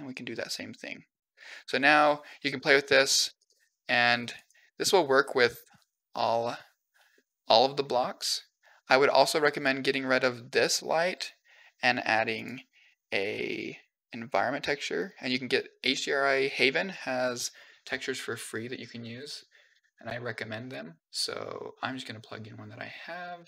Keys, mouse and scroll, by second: 1.6 shift+middle drag, 2.4 middle click, 2.9 click, 3.1 g, 4.5-4.8 middle drag, 5.1 scroll down 2, 5.4-7.0 middle drag, 7.3-7.6 middle drag, 8.6-9.4 scroll down 3, 9.4 click, 9.7 x, 12.2 click, 13.3 click, 16.7 drag.